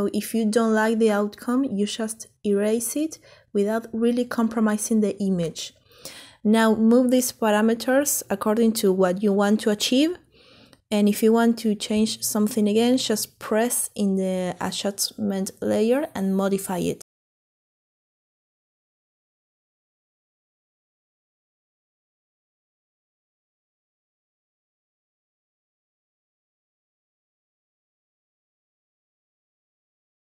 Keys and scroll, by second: 29.5-30.2 typing.